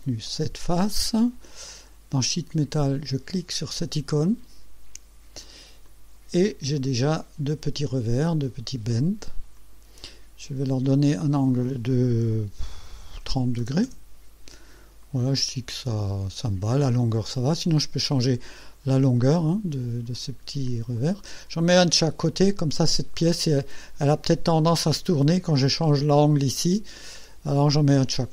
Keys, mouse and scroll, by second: 0.3 ctrl+click, 4.2 click, 5.9-6.8 drag, 6.9 click, 8.3-8.7 scroll down 1, 9.6 click, 10.9 click, 13.4 KP_3, 13.6 KP_0, 13.9 KP_Enter, 15.1-17.0 drag, 20.1 click, 21.0 click.